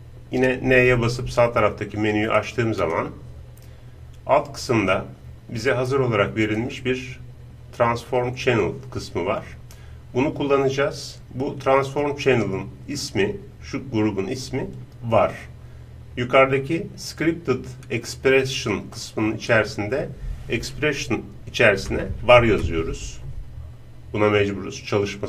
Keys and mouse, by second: 0.7 n, 2.4-4.2 drag, 3.8 middle click, 4.2-7.7 middle drag, 18.9-25.2 drag.